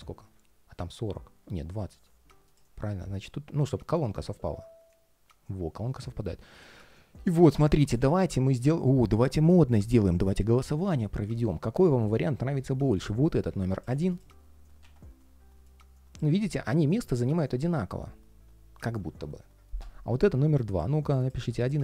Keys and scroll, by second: 4.1 ctrl+shift+3, 5.6 ctrl+shift+3, 6.6 ctrl+shift+4.